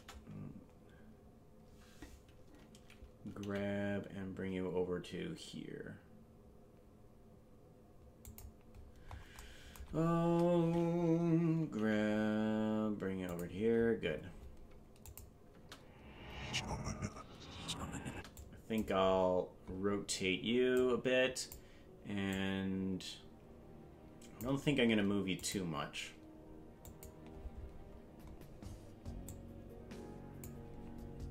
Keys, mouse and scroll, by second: 3.4 g, 8.7-9.3 scroll up 9, 11.8 g, 14.1-14.7 scroll down 9, 15.1 click, 15.5 space, 18.4 click, 19.0-19.3 scroll down 2, 19.6 scroll up 2, 20.7 click, 22.3-24.6 drag, 25.4 click, 26.9 click, 27.7-28.1 scroll down 4, 28.2-28.5 scroll up 4, 29.2-30.5 drag.